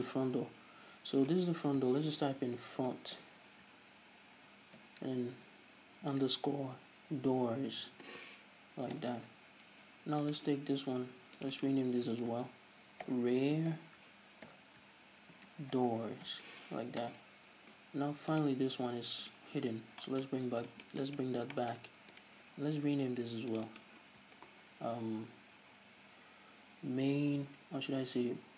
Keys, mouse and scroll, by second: 9.5-10.8 drag, 10.8-12.0 right drag, 12.0 click, 17.6-19.0 drag, 17.6 o, 19.8 click, 20.2-20.6 scroll down 2, 20.6-22.7 middle drag, 20.8-21.2 scroll up 2, 21.7-22.1 scroll up 2, 22.7-24.2 right drag, 24.2 click.